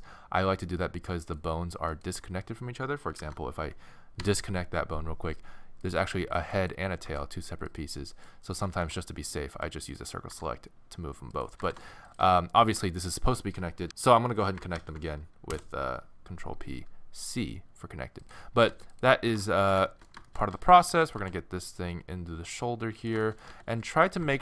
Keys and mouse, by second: 2.0-3.7 right drag, 3.2 alt+p, 5.9 right click, 7.1 g, 8.7 a, 8.8 c, 9.9 click, 10.4 g, 11.0 click, 11.6 g, 12.6-13.9 drag, 14.8 ctrl+p, 18.2-19.7 drag, 18.7 a, 19.3 g, 20.3 click, 20.6 a, 20.8 a, 20.9 a, 21.2 g, 23.5 a, 23.7 a, 24.2 g.